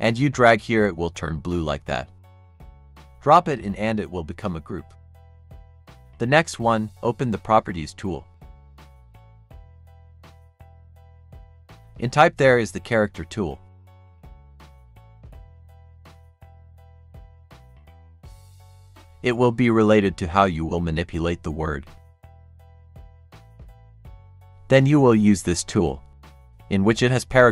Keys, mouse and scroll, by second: 8.5-12.3 drag, 18.9-26.3 drag.